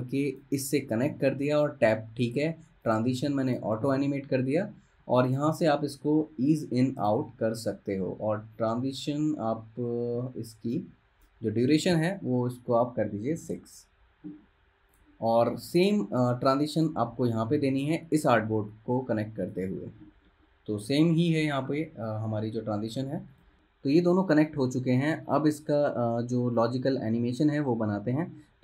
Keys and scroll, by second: 13.5 6, 13.6 Return.